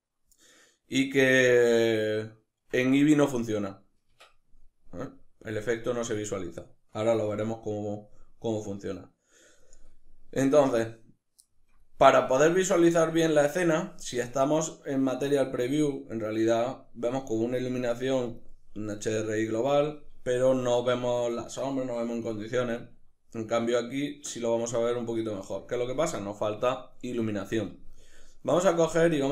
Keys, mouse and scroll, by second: 14.2 z, 18.3-23.9 drag, 22.7 z, 23.9-29.3 middle drag.